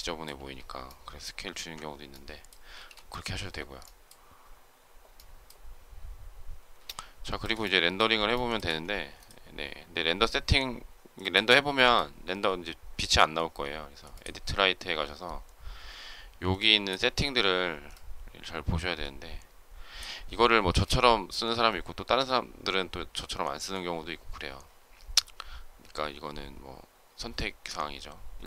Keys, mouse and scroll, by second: 0.3 space, 1.4 ctrl+z, 2.6 space, 6.8 shift+middle click, 8.2 shift+middle click.